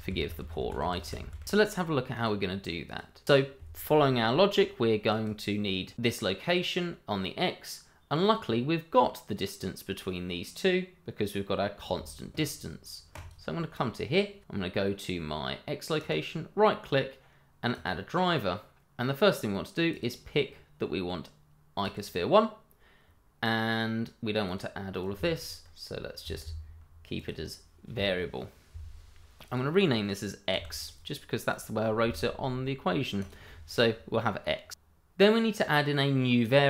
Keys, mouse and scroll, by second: 2.1 click, 5.1 click, 13.1 click, 16.0 right click, 17.7 click, 21.0 click, 24.4 click, 26.2 BackSpace, 27.1 click, 29.4 click, 30.5 x, 31.2 click, 32.0 x, 33.2 click, 35.0 right click, 35.9 click.